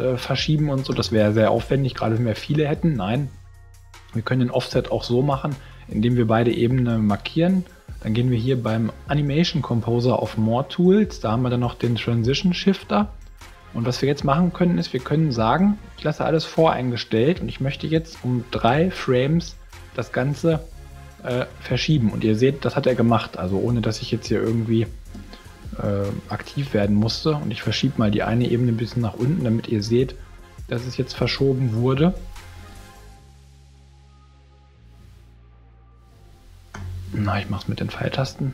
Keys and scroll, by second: 0.9 super+z, 29.8 v, 30.6 shift+v, 31.7 shift+super+z, 32.2 super+z, 36.7 shift+super+z, 37.3 shift+super+Down.